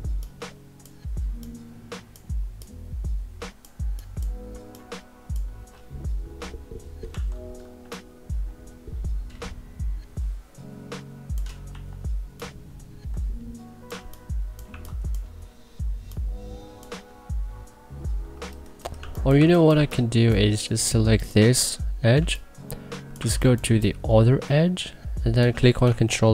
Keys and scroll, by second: 6.8 t, 11.4 e, 13.6 2, 14.4 1, 18.5-20.0 typing, 22.9 1, 23.3 3.